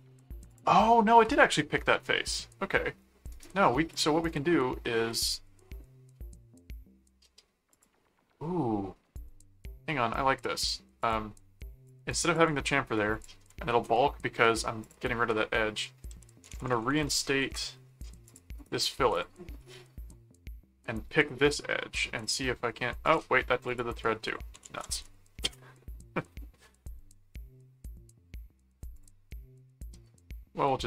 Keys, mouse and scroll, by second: 0.5 click, 2.0 middle click, 3.3 right click, 3.9 click, 7.0-7.5 scroll up 2, 7.7 click, 9.7 scroll down 2, 11.0 click, 11.9 click, 13.1 click, 13.7 Return, 14.8 click, 15.9-17.4 typing, 18.2 click, 18.6 right click, 19.1 click, 21.5 click, 22.2 click, 23.0 click, 23.7 click, 24.0-25.4 typing, 29.0 click.